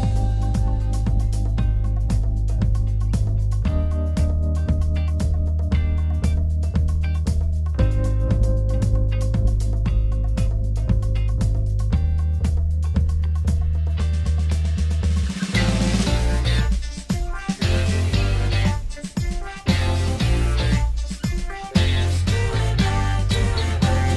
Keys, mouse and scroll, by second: 11.1 ctrl+z, 12.6 ctrl+z.